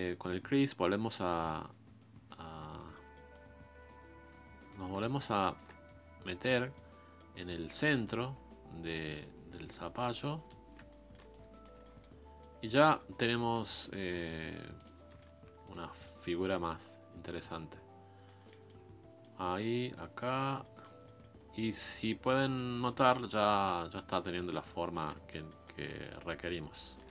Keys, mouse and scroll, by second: 2.9 middle click, 3.3-6.7 drag, 6.7 middle click, 7.4-8.0 scroll down 1, 8.0 scroll down 1, 8.0-9.8 drag, 9.8 scroll down 2, 10.1 shift+click, 10.7 scroll down 1, 10.9 middle click, 11.3 shift+click, 11.8 middle click, 12.2 scroll up 1, 12.4-14.8 middle drag, 14.8 click, 15.1 middle click, 15.3-15.9 scroll up 1, 15.9 middle click, 16.2-16.6 scroll up 1, 16.6-18.4 drag, 18.4 middle click, 18.8-19.2 scroll down 1, 19.2 click, 19.7-21.4 middle drag, 21.4 scroll down 1, 21.6 middle click, 21.9-22.5 scroll up 3, 22.0 middle click, 22.5-23.8 middle drag, 23.8-25.0 shift+drag, 25.0-26.1 middle drag, 26.1-27.1 shift+drag.